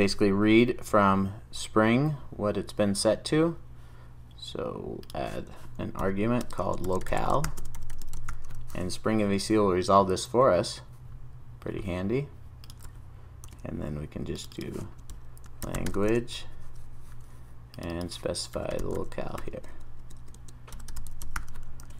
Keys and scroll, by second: 0.0 super+s, 8.9 super+s, 13.5 super+d, 21.8 super+s.